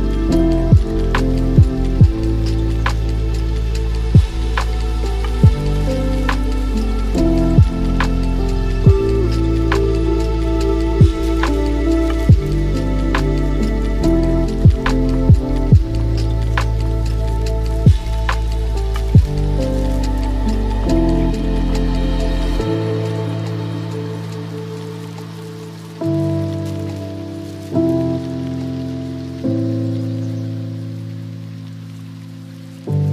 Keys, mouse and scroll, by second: 0.2-3.3 drag, 4.3 scroll down 2, 5.3 drag, 5.8-6.3 scroll down 11, 6.6-7.9 middle drag, 7.9 click, 8.5 ctrl+x, 9.6 shift+a, 13.1-13.7 scroll up 4, 13.7-16.7 alt+right drag, 16.7 click, 18.0 click, 18.8-19.5 scroll down 7, 19.5-20.0 scroll up 6, 21.1 click, 22.5-24.2 middle drag, 24.2 shift+a, 28.2 drag, 32.6 shift+a.